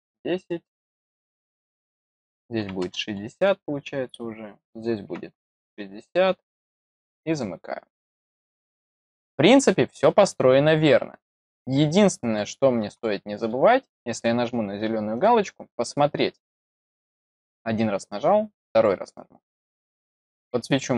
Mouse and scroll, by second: 7.2 click, 8.8-9.3 scroll down 4, 9.6 middle click, 10.2-10.9 scroll down 4, 11.4 middle click, 12.9-13.4 middle drag, 15.1 click, 16.3-16.9 scroll up 2, 17.1-17.7 scroll up 6, 18.7 click, 19.9 click, 20.3-20.9 middle drag.